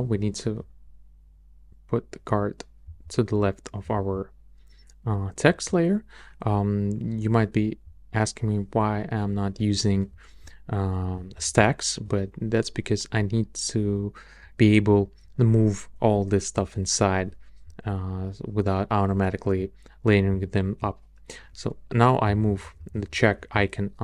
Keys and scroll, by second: 11.1 shift+Up, 22.2 Up, 22.9 Up.